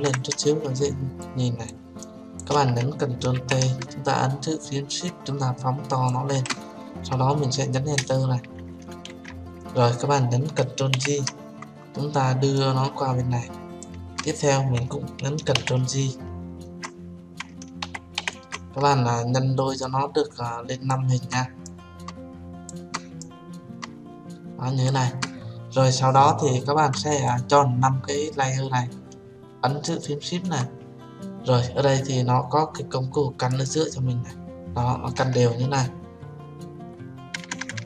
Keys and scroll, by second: 3.8 ctrl+t, 8.4 Return, 11.4 ctrl+j.